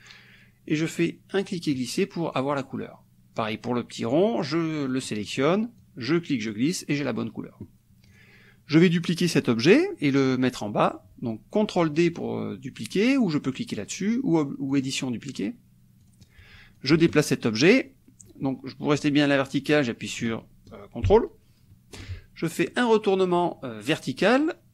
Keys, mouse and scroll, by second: 0.8-1.9 drag, 4.1 click, 5.9 click, 8.1 click, 14.8 click, 16.1 click, 16.8-22.2 ctrl+drag.